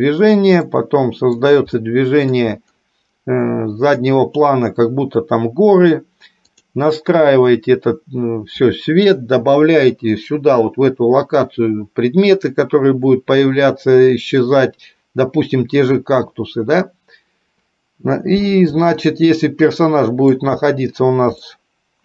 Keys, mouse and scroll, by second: 0.8 middle click, 1.9 middle click, 7.3 click, 19.3-20.5 shift+middle drag, 21.7-22.0 shift+middle drag.